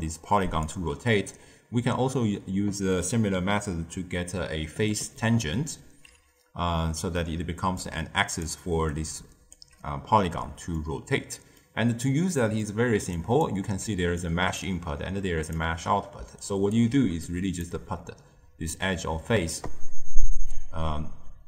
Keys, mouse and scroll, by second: 0.6 d, 1.3 d, 7.1 d, 7.6 d, 7.7-8.3 drag, 8.3 d, 8.8-9.5 right drag, 9.5 d, 10.7-11.9 middle drag, 11.9-12.3 scroll down 1, 12.3-13.1 middle drag, 13.1 click, 13.8-16.8 typing, 14.1-14.5 drag, 15.1 click, 16.3-16.7 right drag, 17.2 click.